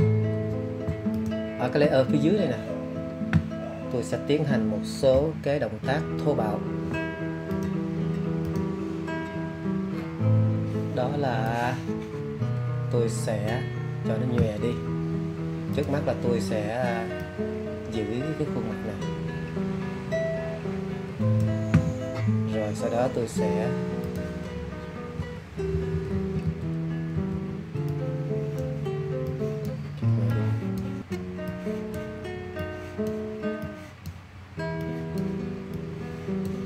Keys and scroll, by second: 20.6 alt+[, 21.4 [, 22.1 [.